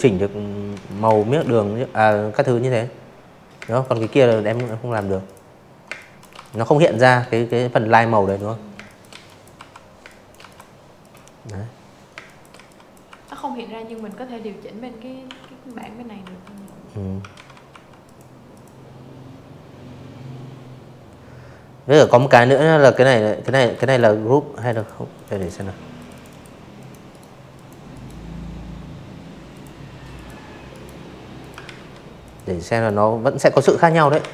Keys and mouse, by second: 0.5-3.7 typing, 0.6 click, 1.4 click, 1.8 click, 2.2 click, 2.9 click, 3.3 click, 3.8 click, 4.2 click, 5.1 click, 5.7-7.3 typing, 5.8 click, 6.1 click, 7.0 click, 7.4 click, 7.9 click, 9.0 space, 9.1 click, 9.5 z, 9.5 click, 10.0 v, 10.1 click, 10.8 click, 12.2 i, 12.6 click, 13.1 v, 13.4 click, 14.2 ctrl+z, 14.6 v, 14.9 click, 15.4 click, 18.8 click, 19.0 click, 19.5 click, 20.5 ctrl+z, 20.6 click, 20.8 click, 21.5 click, 21.7 click, 22.1 click, 22.2 click, 22.4 click, 22.9 click, 23.1 click, 23.2 click, 23.7 click, 24.0 right click, 24.5 click, 24.8 right click, 26.4 click, 27.0 click, 27.6 right click, 28.3 click, 28.5 ctrl+z, 29.1 click, 29.6 right click, 30.5 ctrl+z, 30.8 click, 31.1 ctrl+z, 31.9 click, 32.5 click, 32.8 ctrl+z, 33.6 click, 33.8 ctrl+z.